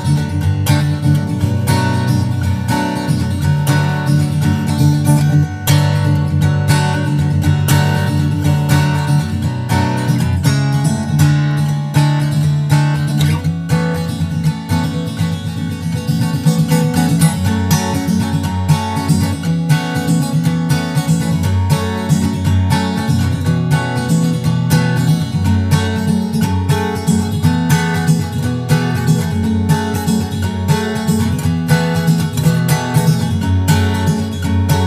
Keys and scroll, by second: 9.4 shift+super+Right, 10.7 super+c, 17.3 super+Right, 20.2 super+v, 20.2 super+z, 20.8 shift+super+Right, 21.0 super+v, 21.8 super+Left, 25.4 super+Left, 26.0 super+Right, 28.7 super+Right, 32.4 shift+super+Left, 32.8 super+Right.